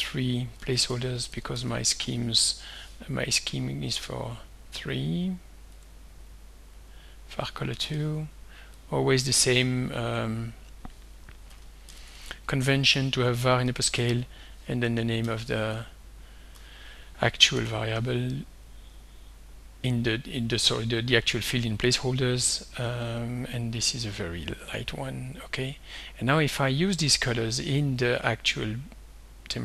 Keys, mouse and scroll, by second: 0.0-2.7 typing, 4.1 click, 5.8 click, 7.8 shift+5, 8.8 click, 10.2 click, 11.2-16.5 typing, 17.6 shift+5, 24.1 click, 25.4 click.